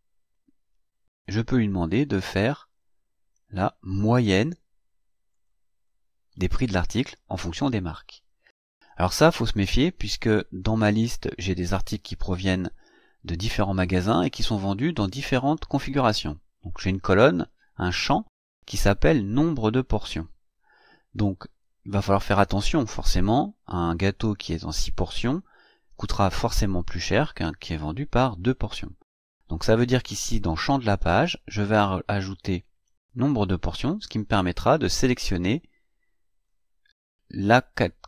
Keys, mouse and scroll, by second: 1.7 click, 3.9 click, 5.3 click, 17.3-21.6 drag, 32.7-33.7 drag, 35.0-36.7 drag.